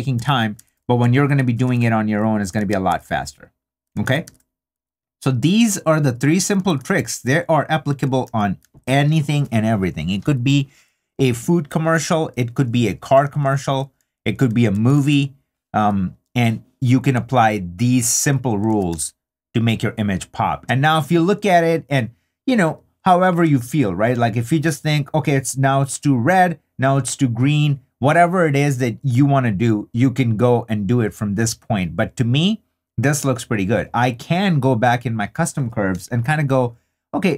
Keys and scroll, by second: 0.2 super+d, 5.3 super+d, 6.6 super+d, 8.2 super+d, 13.2 super+d, 18.7 super+d, 20.6 shift+d.